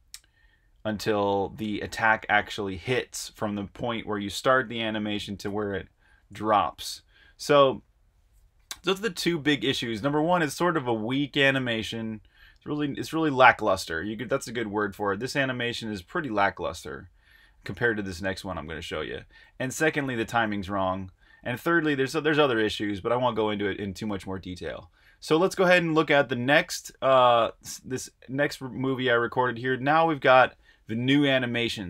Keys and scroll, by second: 6.0 super+Tab, 6.2 typing, 7.8-8.7 typing, 11.7-15.0 typing, 17.1-17.9 typing, 19.8-23.9 typing, 25.3-26.1 typing, 26.8 super+`, 28.8 f.